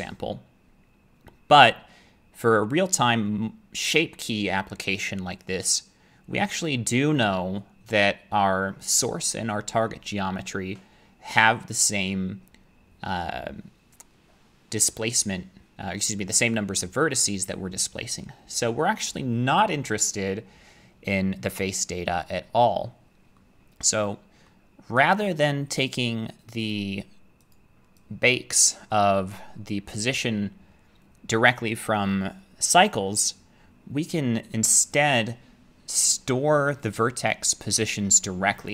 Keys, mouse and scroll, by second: 23.4 middle click, 24.5 middle click, 26.7 click, 27.5 click, 29.4 click.